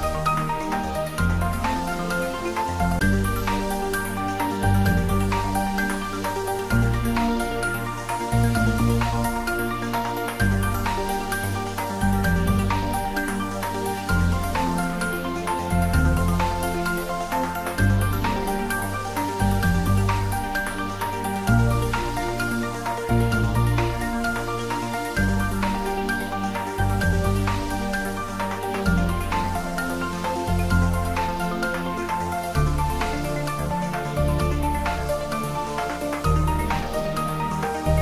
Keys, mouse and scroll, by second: 3.5 click, 5.8 click, 8.9-10.0 scroll down 1, 11.0-11.7 scroll up 1, 18.0-21.7 scroll down 1, 22.4 click, 28.6 click, 30.8 right click, 31.9 click, 37.8-38.0 scroll up 1.